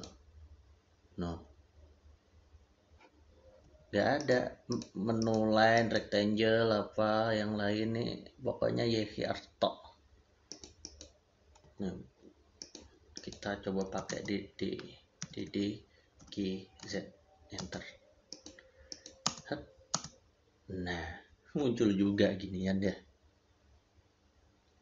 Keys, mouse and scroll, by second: 3.5 click, 3.5 Escape, 4.0 click, 10.3 click, 11.4 click, 11.5 Escape, 12.4 click, 13.9 e, 13.9 space, 15.1 d, 17.4 space, 18.1 click.